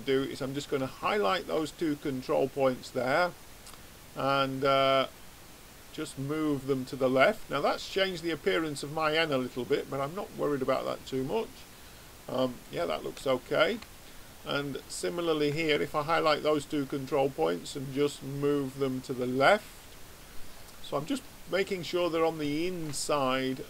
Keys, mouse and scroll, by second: 4.3 click, 8.2-10.6 middle drag, 12.4-18.3 middle drag, 15.0-18.7 drag, 19.7-23.6 middle drag.